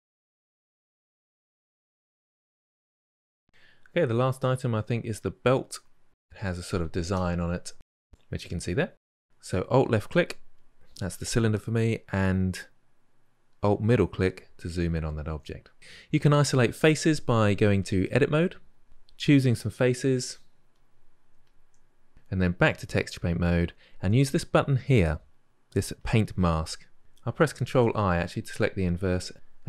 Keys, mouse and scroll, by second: 0.0 click, 0.5 click, 0.8 ctrl+shift+middle click, 1.4 click, 1.7-2.7 ctrl+shift+middle drag, 2.9-10.4 middle drag, 10.4 alt+click, 13.7 alt+middle click, 14.3-18.6 middle drag, 18.6-20.6 drag, 23.3-25.9 drag, 27.4 ctrl+i.